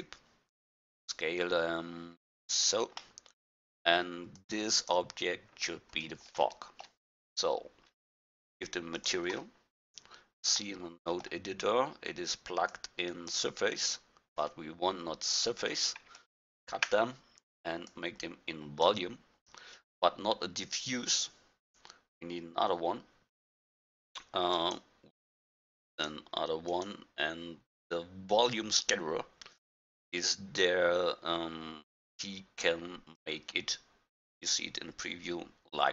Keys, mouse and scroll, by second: 0.8 s, 3.3-4.0 middle drag, 4.4-5.5 drag, 5.5 middle click, 5.6 click, 5.7 middle click, 5.9 click, 6.0-9.0 middle drag, 9.0-10.8 drag, 10.8-12.7 middle drag, 12.7-17.9 drag, 18.0-19.8 drag, 24.6-28.4 drag, 32.0-33.8 drag.